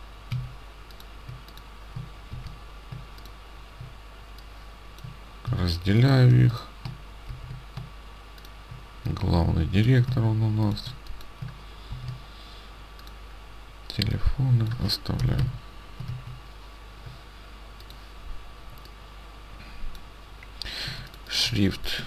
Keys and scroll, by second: 0.4 ctrl+x, 2.3 ctrl+v, 5.5 ctrl+x, 7.4 ctrl+v, 10.1 ctrl+x, 12.0 ctrl+v, 15.3 Delete, 16.0 Delete, 16.1 ctrl+a, 16.4 ctrl+a, 21.0 ctrl+space.